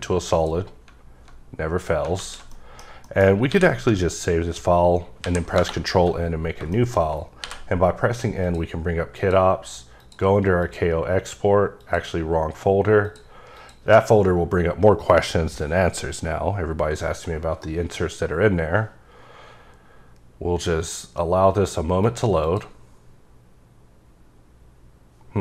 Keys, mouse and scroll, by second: 0.3 click, 2.1 alt+z, 2.5 middle click, 3.0 middle click, 3.5 s, 4.4 ctrl+s, 5.2 n, 5.5 Return, 6.4 scroll down 3, 6.7 shift+middle click, 7.0 scroll up 1, 7.4 n, 8.4 click, 9.2 click, 10.0 click, 10.6 click, 11.8 click, 13.1 click, 13.5 click, 22.0 click, 22.4 click.